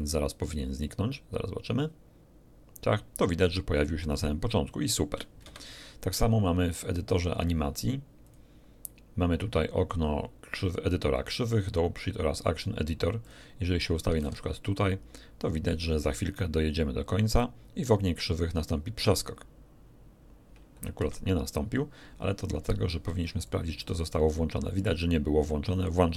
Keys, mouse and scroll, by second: 5.4 Escape, 6.9 click, 8.2 click, 13.2 click, 14.2 alt+a, 16.0 click, 20.9 Escape, 23.4 click, 25.7 click.